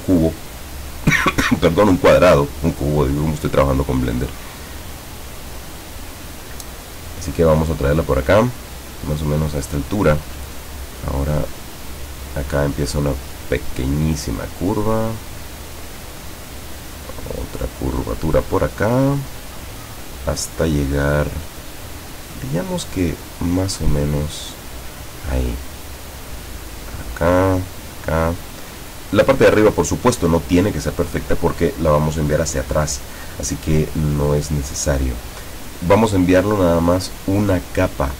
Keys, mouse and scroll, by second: 6.8 click, 10.7 click, 11.8 click, 14.9 click, 17.4 click, 24.5 click, 27.1 click, 27.8 click, 28.8 click, 34.1 click, 34.7 click.